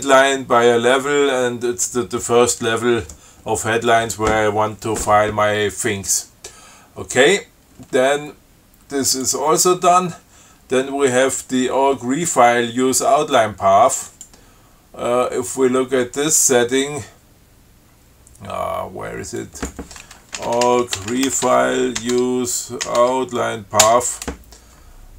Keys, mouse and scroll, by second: 9.3 click, 14.3 click, 19.7 click, 20.4-23.1 typing, 22.4 Tab, 23.2 Tab, 24.1 Return.